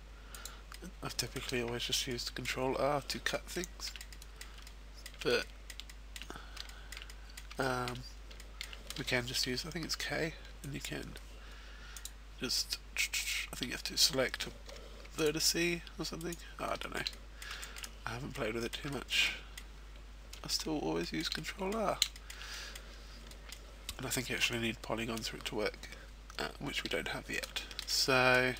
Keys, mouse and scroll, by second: 0.4 click, 0.7 middle click, 1.5 a, 1.7-2.9 scroll down 3, 2.1 middle click, 3.3 shift+middle click, 4.0 shift+middle click, 4.1 middle click, 4.5 shift+middle click, 5.4 shift+middle click, 5.9 shift+middle click, 6.3-6.6 scroll up 1, 6.6 shift+middle click, 7.0 middle click, 7.6 shift+middle click, 8.0-8.4 scroll up 1, 8.4 shift+middle click, 9.4 k, 12.8 right click, 14.3 k, 15.6 right click, 15.9 shift+middle click, 16.1 middle click, 16.3 shift+middle click, 16.6 scroll down 3, 16.9 middle click, 17.2 shift+middle click, 17.5 middle click, 17.9-18.4 scroll up 2, 18.8 shift+middle click, 19.0 middle click, 19.9 shift+middle click, 20.3 middle click, 21.2 middle click, 22.0 shift+middle click, 25.7 shift+middle click, 26.3 middle click, 26.7 shift+middle click, 27.0 middle click, 28.3 middle click, 28.4 shift+middle click.